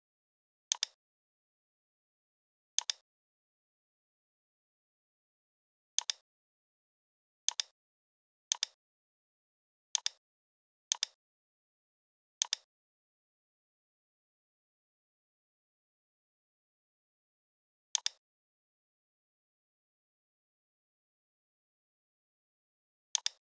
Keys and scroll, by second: 14.2 l, 19.7 shift+x, 21.8 v.